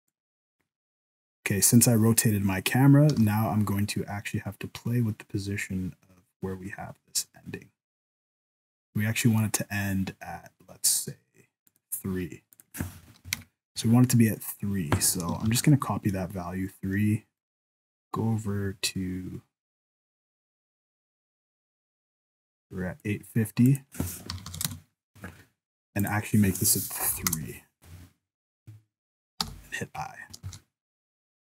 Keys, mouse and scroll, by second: 1.0 right click, 2.2-3.1 scroll up 1, 3.1-4.0 scroll up 1, 3.1 g, 12.5 click, 15.4 ctrl+c, 17.4 right click, 17.9 click, 23.7 click, 26.0 click, 29.4 i, 30.5 ctrl+s, 31.2 click.